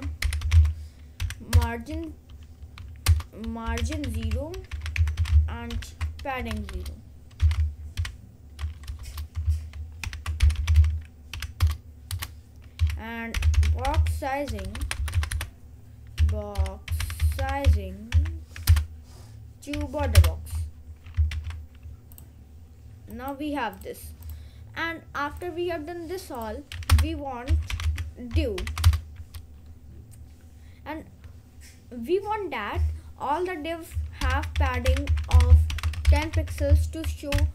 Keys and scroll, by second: 0.0-1.3 typing, 3.2 Return, 3.4-11.4 typing, 12.2 Return, 12.8-14.2 typing, 16.4-18.1 typing, 19.0 Return, 19.8 b, 20.2 Return, 21.4 ctrl+s, 27.0 Return, 27.3-28.6 typing, 28.9 Return, 34.0-37.0 typing, 37.4 ctrl+;.